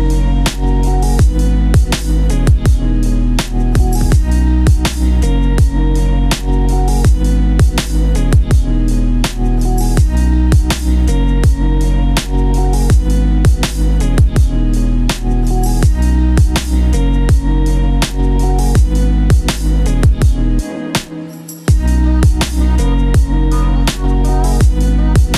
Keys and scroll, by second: 11.5 ctrl+z, 11.9 ctrl+g, 14.5 ctrl+q, 14.7 ctrl+k, 14.9 ctrl+u, 17.0 ctrl+z, 20.1 ctrl+g.